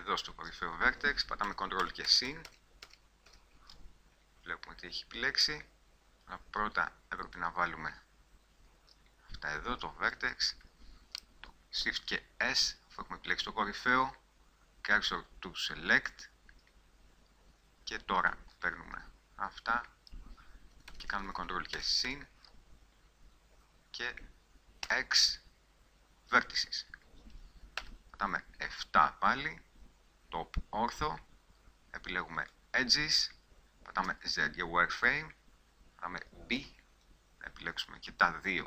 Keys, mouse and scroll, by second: 1.6 ctrl+KP_Add, 2.0-2.7 ctrl+KP_Add, 3.0 ctrl+KP_Add, 3.4 ctrl+KP_Add, 4.7 middle click, 5.9 middle click, 6.2-7.5 middle drag, 7.5-12.0 drag, 12.0 shift+s, 18.4-21.0 middle drag, 21.0-21.9 ctrl+KP_Add, 22.2 ctrl+KP_Add, 25.0 x, 28.0 KP_7, 32.6-34.3 drag, 34.3 z, 36.8 b.